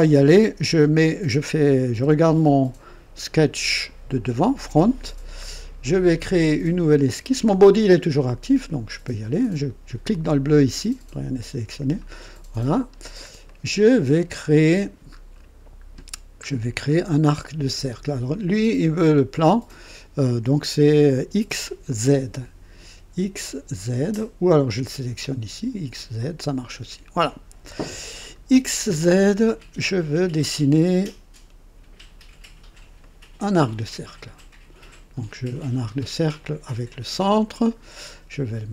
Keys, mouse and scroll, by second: 1.9 KP_1, 10.0 click, 11.6 click, 12.8-13.2 scroll up 1, 13.4-14.4 right drag, 13.4 click, 14.4-15.0 scroll down 2, 15.4 scroll down 1, 16.4 scroll down 1, 16.9-17.5 right drag, 25.9 click, 28.2-28.6 scroll up 1, 29.1-30.0 right drag, 33.0-33.8 right drag, 36.8 click.